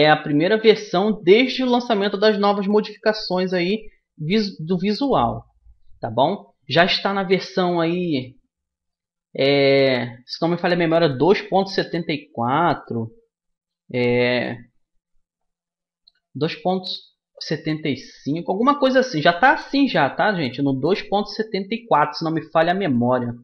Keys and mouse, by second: 2.1-4.1 drag, 6.0-7.7 drag, 7.7-11.6 middle drag, 11.6 a, 14.1 shift+a, 22.7-23.4 middle drag.